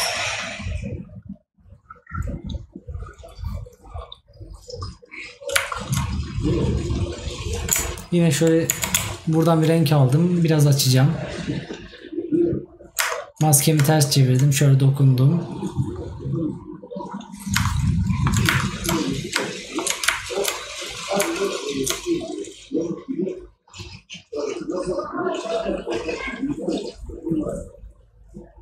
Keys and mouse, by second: 18.1 right click.